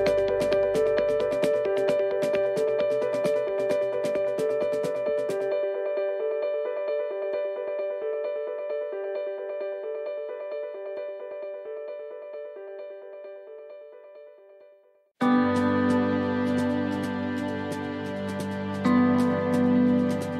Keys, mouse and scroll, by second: 0.0 shift+middle click, 1.2 shift+d, 6.0 click, 19.7 click.